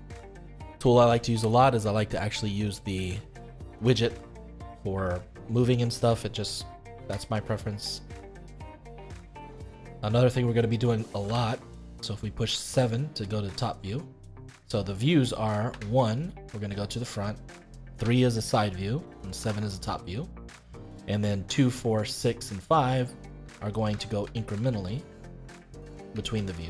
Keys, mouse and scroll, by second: 2.6-5.1 drag, 6.9 ctrl+z, 7.5-8.6 middle drag, 8.6 scroll down 1, 8.8-11.2 middle drag, 11.2 KP_7, 15.7 KP_1, 17.9 KP_3, 19.4 KP_7, 23.4-26.6 typing.